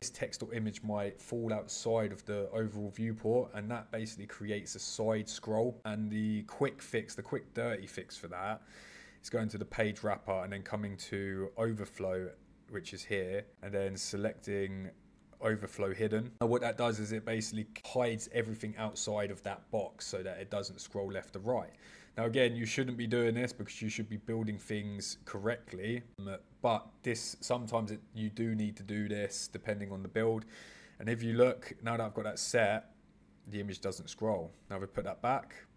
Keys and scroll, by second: 25.3 super+z.